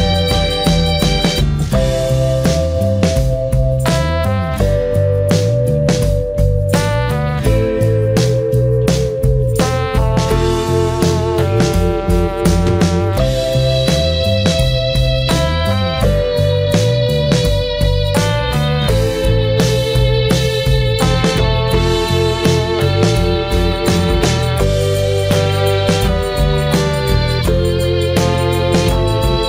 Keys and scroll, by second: 25.0 ctrl+e.